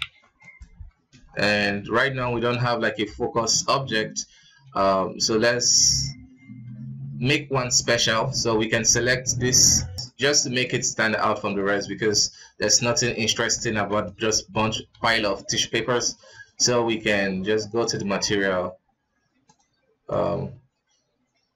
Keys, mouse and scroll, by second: 0.4 right click, 0.7 scroll down 4, 1.2 scroll up 3, 2.5 scroll up 1, 2.8 ctrl+s, 4.6 alt+a, 5.8 right click, 7.6 scroll up 2, 9.2 s, 10.2 r, 10.7 g, 11.8 scroll down 3, 12.4 scroll up 2, 13.0 g, 13.7 s, 15.0 ctrl+s, 16.3-16.6 drag, 17.8 click, 19.4 click, 20.0 click.